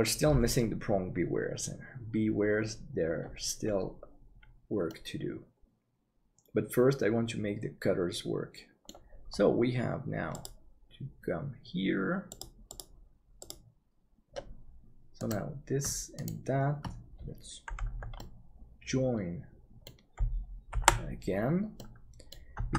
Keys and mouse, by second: 4.9-8.8 middle drag, 13.4 click, 18.1-20.0 middle drag, 20.8 ctrl+j, 21.7 middle click, 22.6 Tab.